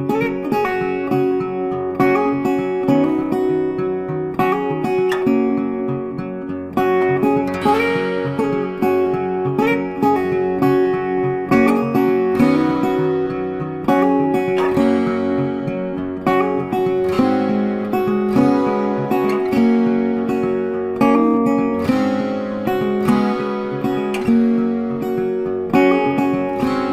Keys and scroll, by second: 13.8 ctrl+t.